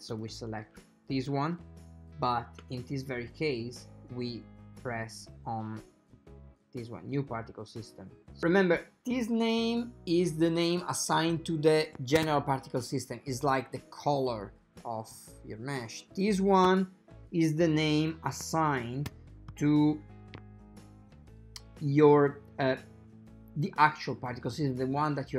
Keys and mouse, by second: 8.4 click.